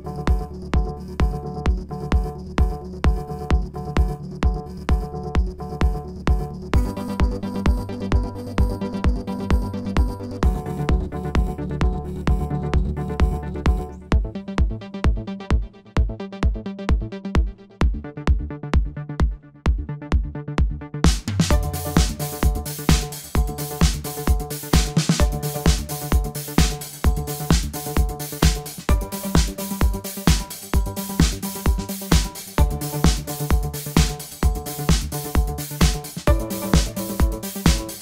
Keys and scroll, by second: 2.3 typing, 4.1 typing, 6.4 typing, 7.9 alt+F9, 8.6 typing, 11.2 typing, 14.2 typing, 15.3 typing, 22.6 typing, 26.7-27.5 typing, 35.6 alt+F9.